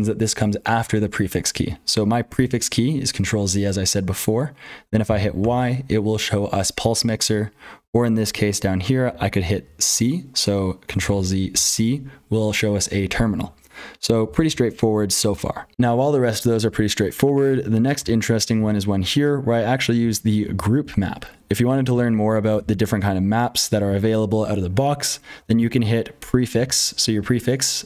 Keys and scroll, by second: 0.0-27.8 typing, 2.3 ctrl+z, 10.9 ctrl+z, 13.2 ctrl+d, 15.7 F12, 19.7 ctrl+[, 23.8 ctrl+[, 26.5 ctrl+z.